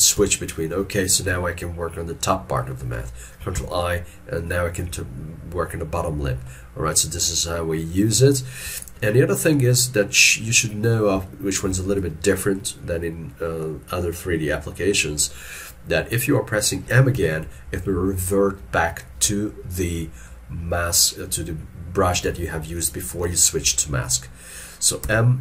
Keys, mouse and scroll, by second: 3.6 ctrl+i, 8.8 ctrl+click, 11.2 scroll up 1, 11.3 shift+middle click, 17.2 m, 25.1 m.